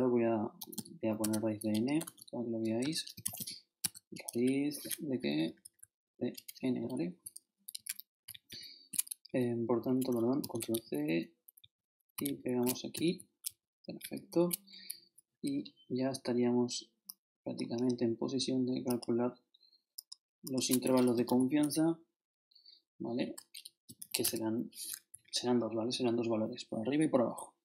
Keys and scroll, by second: 0.0-0.7 typing, 1.2 shift+Tab, 1.9-3.9 typing, 2.8 shift+Delete, 5.1 shift+Up, 6.3 shift+Return, 7.5 shift+Up, 7.7 shift+Right, 10.2 shift+super+Right, 10.4 shift+super+c, 10.7 shift+super+Right, 11.6 shift+Right, 12.6 shift+super+Right, 12.9 shift+super+v, 13.5 shift+super+Down, 14.0 shift+super+Left, 20.9-21.8 typing, 23.2 shift+Return, 23.6-24.5 typing, 25.1 shift+Up.